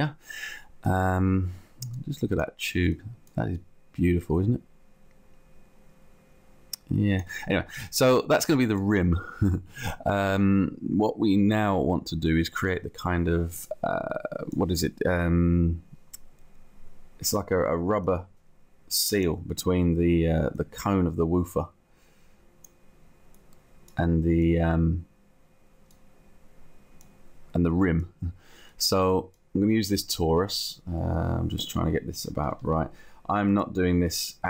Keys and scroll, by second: 32.3 Down.